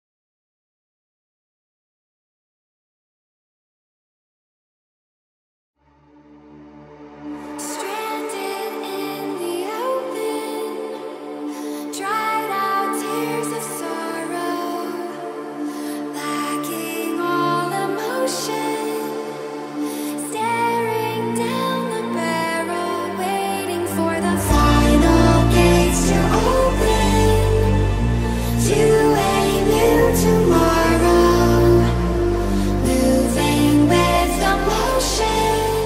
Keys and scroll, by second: 3.3 Up, 18.3 0, 20.3 1, 20.8 -, 22.9 a, 23.1 n.